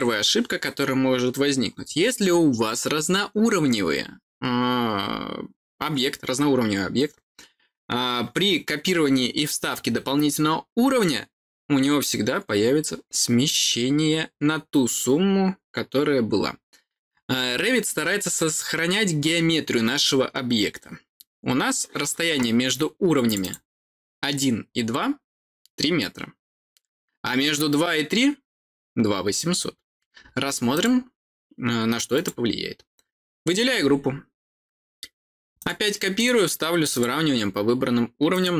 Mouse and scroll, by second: 23.2 click, 23.3 click, 30.7 click, 32.1 click, 35.5 click, 36.1 click, 36.8 click, 38.2 click.